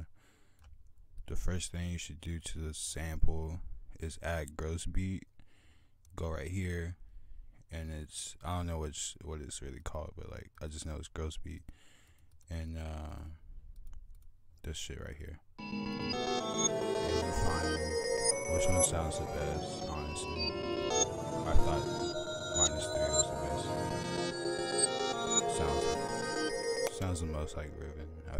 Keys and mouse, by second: 1.0 click, 1.8 click, 4.9 click, 7.1 click, 7.7 right click, 8.6 right drag, 8.8 right click, 10.2 right click, 13.5 click, 14.0 click, 14.6 click, 27.6 click.